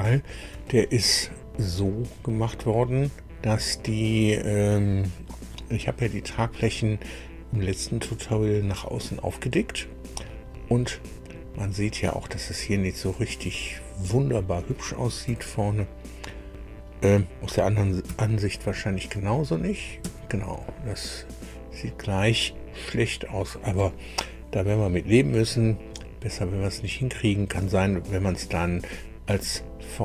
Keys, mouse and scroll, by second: 1.4 scroll up 2, 1.9-4.4 drag, 10.9-14.1 drag, 15.2 KP_1, 18.0 KP_4, 20.0 KP_1.